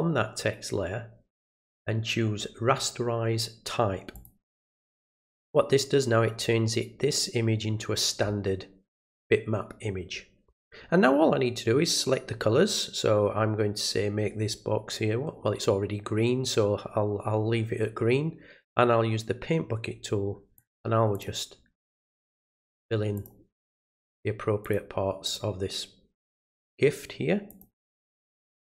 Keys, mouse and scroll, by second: 4.1 click, 20.5 click, 21.1 click, 22.0 click, 23.1 click, 23.8 click, 24.6 click, 25.2 click, 26.2 click, 27.5 click.